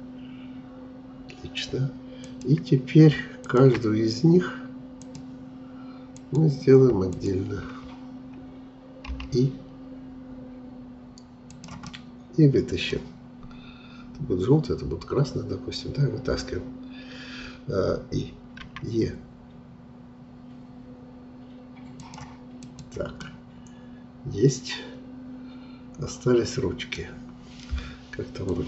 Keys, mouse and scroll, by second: 2.2-9.0 drag, 11.8-14.8 middle drag, 18.6 e, 22.6 click, 23.2-26.2 middle drag, 27.1 scroll down 2.